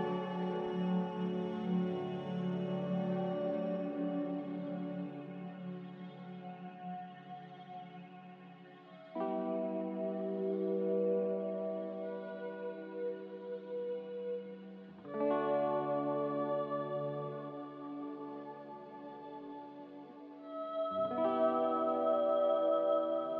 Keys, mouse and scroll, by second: 3.9-4.7 typing, 16.2 z, 18.1-18.9 typing.